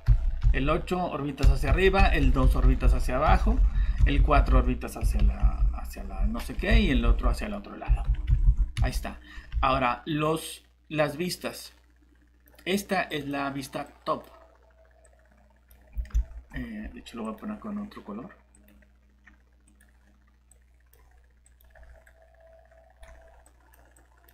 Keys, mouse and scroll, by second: 0.1 8, 0.4 8, 1.8-5.5 typing, 6.7-8.8 typing, 9.5 alt+Tab, 16.1 ctrl+z, 22.1 right click, 22.5-23.0 typing, 23.4 click.